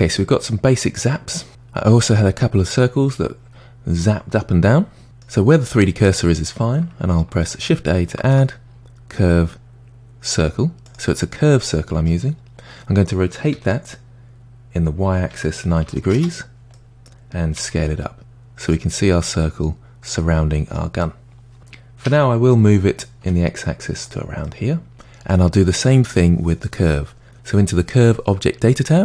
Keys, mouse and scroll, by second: 0.0-0.4 scroll up 1, 0.4-1.5 middle drag, 5.0-8.0 middle drag, 8.2 shift+a, 11.7-13.6 middle drag, 13.6 r, 16.8-17.6 middle drag, 17.6 s, 19.0-21.6 middle drag, 22.1 g, 24.5-26.2 middle drag, 26.2-27.3 scroll up 2.